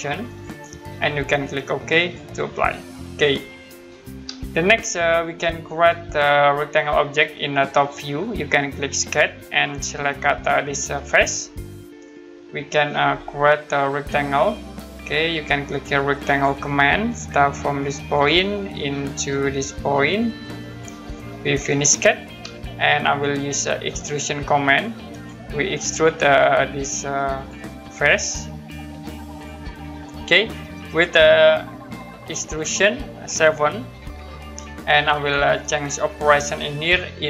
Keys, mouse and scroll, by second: 2.0 click, 2.6 scroll down 1, 3.1 scroll up 1, 4.5 middle click, 6.0 middle click, 9.0 click, 9.7 scroll down 1, 11.1 click, 12.3-12.8 scroll down 1, 13.9 middle click, 14.7-15.2 scroll up 1, 16.2 click, 17.1-18.1 scroll down 1, 18.1 click, 18.9 middle click, 20.7 click, 22.6 middle click, 25.1 click, 27.3 click, 28.0-29.3 scroll down 1, 30.3 scroll up 1, 32.2 middle click, 34.0 7, 36.3 click.